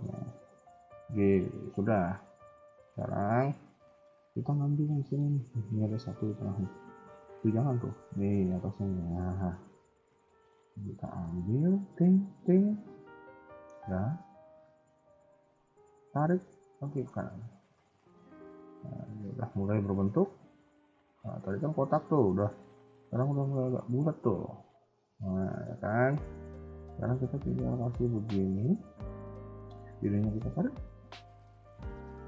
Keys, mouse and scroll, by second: 1.0-1.4 scroll down 3, 1.4 shift+middle click, 1.7 middle click, 2.4-3.0 scroll up 2, 3.0 a, 3.2 KP_1, 3.6-4.6 scroll up 3, 3.8 a, 3.9 a, 4.8-6.8 scroll up 4, 5.0 shift+middle click, 6.8 scroll up 1, 6.8 b, 8.8-9.3 scroll down 8, 9.3 shift+middle click, 9.7 scroll up 2, 10.6 middle click, 10.6-11.1 scroll up 3, 11.7 shift+click, 12.3 shift+click, 12.6 KP_1, 13.0 scroll down 3, 13.3 shift+middle click, 14.8 g, 17.0-17.7 scroll down 2, 17.8 scroll down 1, 17.8 middle click, 22.5 KP_1, 22.8 scroll down 2, 23.1 middle click, 24.3 KP_1, 24.6 KP_3, 24.7 KP_1, 25.4 shift+middle click, 25.7 scroll up 1, 26.4 middle click, 27.9 click, 28.7 KP_1, 29.1 a, 29.3 a, 29.4 b, 30.6 KP_3.